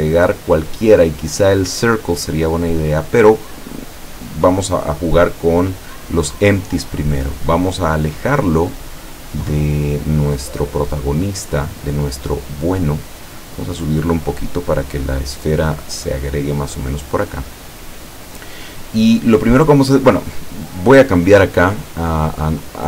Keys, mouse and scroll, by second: 4.5 click, 6.6-10.2 drag, 10.8-14.0 drag, 14.6-16.8 drag.